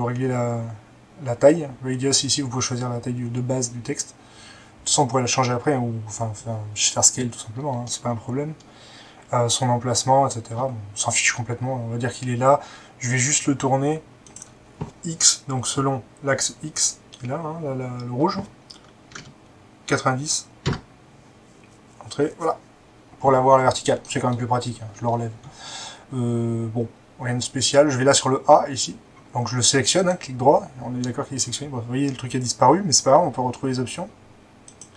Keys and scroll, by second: 19.1 typing, 20.6 Return.